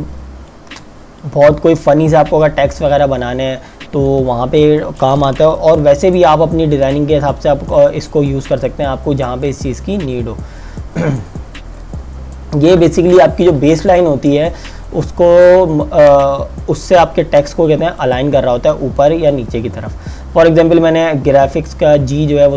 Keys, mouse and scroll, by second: 0.4 space, 1.2 click, 5.7 t, 6.9 click, 18.0 click.